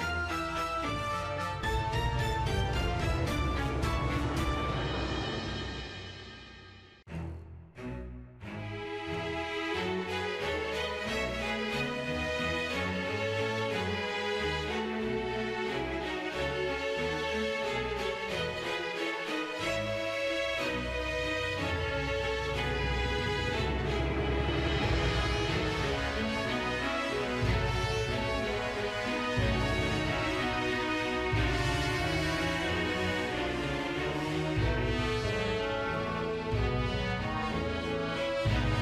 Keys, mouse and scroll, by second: 0.0 shift+middle click, 0.4 shift+middle click, 0.6 shift+middle click, 1.0 shift+middle click, 1.3 shift+middle click, 1.6 shift+middle click, 2.5 shift+middle click, 3.0 shift+middle click, 4.0 click, 4.1 middle click, 5.6 middle click, 6.6-7.4 middle drag, 8.8 middle drag, 11.9-12.6 middle drag, 12.6 shift+middle drag, 12.8 shift+middle click, 13.1-15.9 shift+middle drag, 22.5 click, 22.6 scroll down 3, 22.7 middle click, 22.8-23.2 scroll up 3, 22.9 shift+middle click, 23.2 shift+middle click, 23.4 click, 23.6 click, 24.6 a, 25.3 i, 26.0 drag, 26.2 click, 26.8 click, 27.2 click, 27.5 g, 28.1 middle drag, 28.4 click, 29.1 click, 29.4 scroll down 1, 29.5 middle drag, 29.8 g, 30.0 click, 30.4 scroll down 1, 30.5 middle click, 30.7 shift+middle click, 30.8 shift+middle drag, 31.2 i, 31.6 click, 31.7 shift+middle click, 31.9 scroll down 1, 31.9-32.3 shift+middle drag, 32.4 click, 32.8 space, 34.2 space, 34.6 click, 35.0 click, 35.4 shift+d, 36.0 drag, 37.0 right click, 37.4 click, 37.6 right click, 38.1 click, 38.7 click.